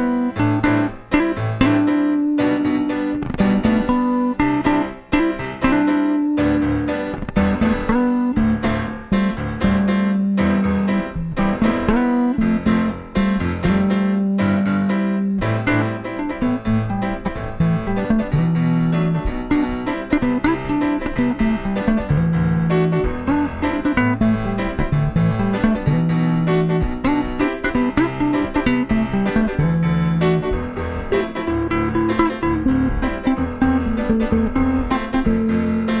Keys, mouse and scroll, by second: 2.8-4.5 drag, 8.0-13.2 drag, 13.2 middle click, 13.8-17.2 drag, 17.3 middle click, 17.9-20.9 middle drag, 25.8-29.5 drag, 34.2-36.0 drag.